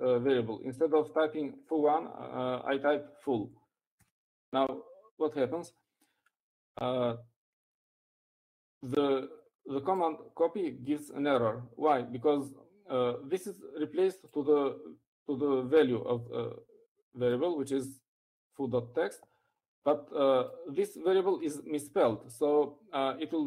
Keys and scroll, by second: 1.0-2.3 typing.